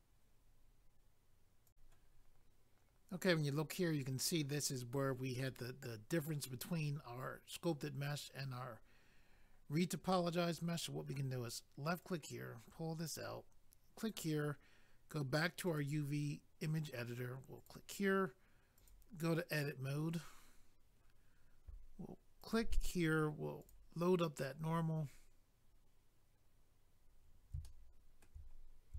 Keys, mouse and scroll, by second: 1.7 click, 7.2-7.5 scroll up 1, 12.0 click, 14.0 click, 14.1 click, 15.6 click, 15.8 click, 17.6 click, 18.7 click, 22.4 click, 23.6 click, 24.5 scroll down 1, 26.4 scroll up 1, 27.6 shift+middle click, 28.5 scroll up 1.